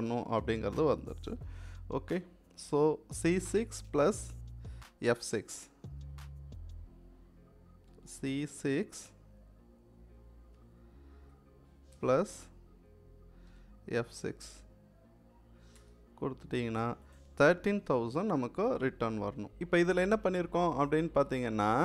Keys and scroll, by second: 0.1 =, 7.8 c, 10.4 6, 13.3 f, 13.9 6, 15.6 Return.